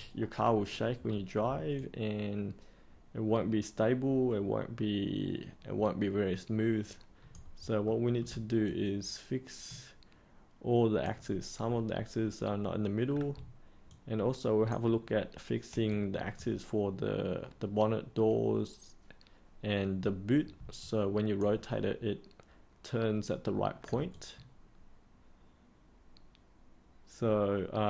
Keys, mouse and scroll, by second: 1.0 scroll down 1, 1.7-7.8 alt+drag, 7.8 middle click, 8.6-11.0 alt+drag, 13.8 alt+click, 15.8 alt+click, 20.8 alt+click, 24.1-27.8 alt+drag.